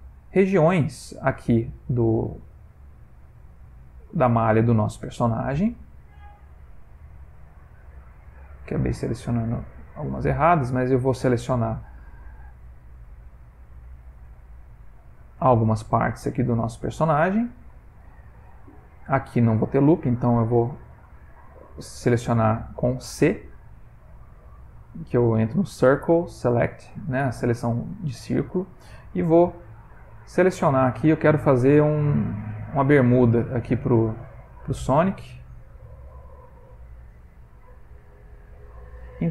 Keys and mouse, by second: 25.0 c, 27.4 middle click, 27.7 middle click, 28.8 c, 30.3 middle click, 31.0 middle click, 32.4 alt+shift+click, 33.8 c, 36.0 middle click, 36.7-37.4 typing.